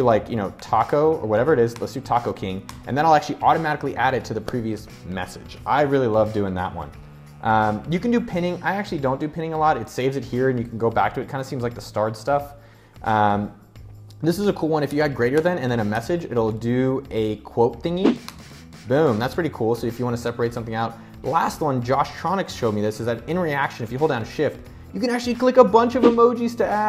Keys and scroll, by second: 0.0-0.9 typing, 1.2 Return, 2.1 Return, 14.5-16.4 typing, 17.7 Return.